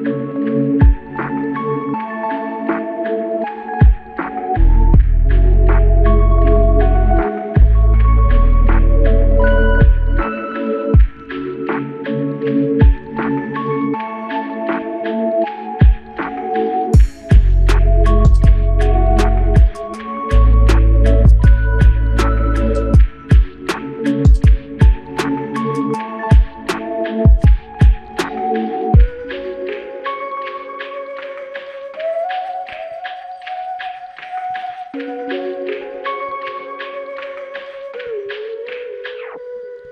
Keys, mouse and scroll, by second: 2.4 double click, 4.5 alt+click, 6.0 double click, 8.2 alt+click, 11.0 typing, 13.0 double click, 15.1 alt+click, 17.0 double click, 18.9 f, 20.0 double click, 22.4 alt+click, 25.8 alt+m, 27.1 shift+click, 29.5 shift+click, 32.6 alt+click, 35.3 typing, 36.8 double click.